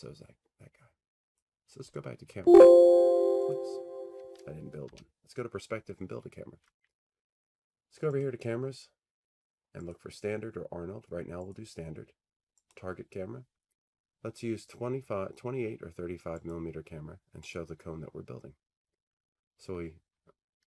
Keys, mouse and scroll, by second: 1.3 click, 2.4 c, 3.6 click, 8.2 click, 10.0 click, 11.6 click, 12.9-14.9 drag, 16.5-19.7 drag.